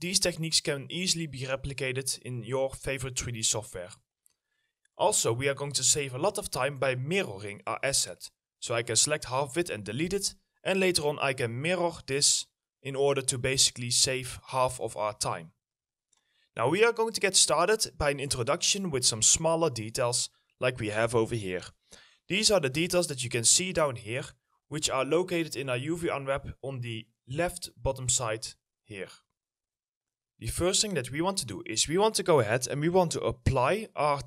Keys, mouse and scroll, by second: 6.7 alt+middle click, 7.9 middle click, 9.5 Delete, 12.1 middle click, 15.2 alt+middle click, 15.9 middle click, 17.7-18.9 scroll up 1, 19.3 alt+middle click, 20.4 alt+middle click, 22.5 right click, 22.7-24.0 typing, 26.2-26.5 scroll down 1, 26.9 scroll up 1, 31.2 middle click.